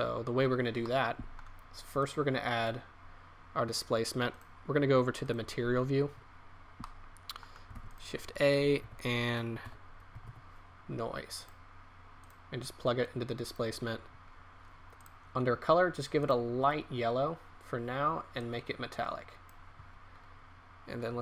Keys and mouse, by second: 2.8-3.9 drag, 13.0-13.6 right drag.